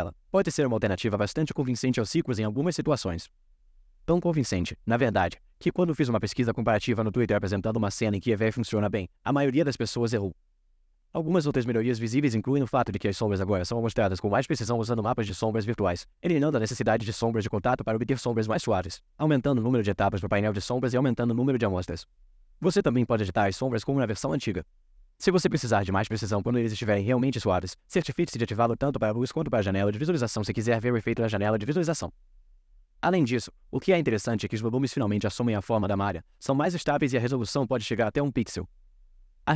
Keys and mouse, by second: 11.5 g, 17.5-19.4 drag, 21.5-22.6 drag, 23.5 click, 26.0 click, 27.2 click, 28.1 click, 29.4 click.